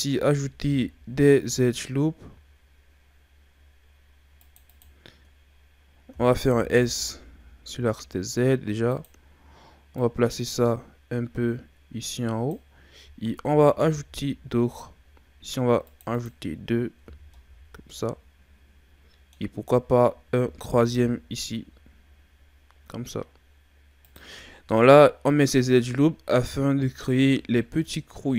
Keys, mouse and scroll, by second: 0.6 ctrl+r, 6.2 s, 10.0 click, 13.5 ctrl+r, 17.1 a, 17.3-20.4 middle drag, 20.4 ctrl+r, 24.4 middle click, 25.2-27.0 scroll up 1, 27.0-27.6 scroll up 2, 27.6-28.3 middle drag.